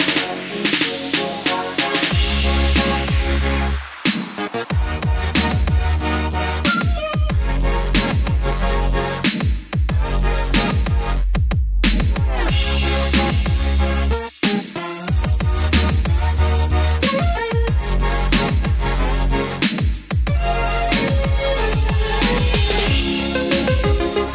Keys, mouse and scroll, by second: 2.4 scroll down 1, 4.2-10.7 drag, 11.7 space, 12.1 click, 16.7-18.8 drag, 23.4-24.3 scroll down 1.